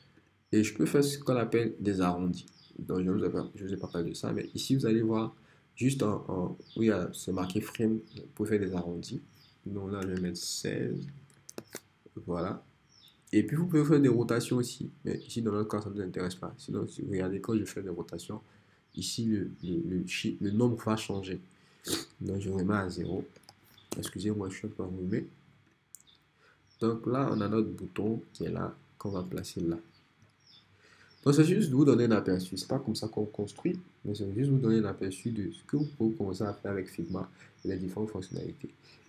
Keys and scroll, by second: 10.3 shift+1, 11.1 shift+6, 11.6 Return, 23.5 shift+0, 23.9 Return.